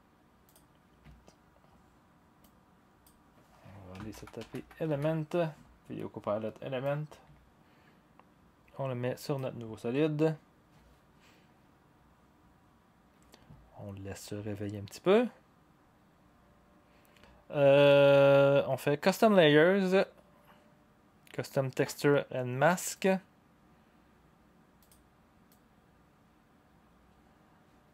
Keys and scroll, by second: 3.7-5.3 typing.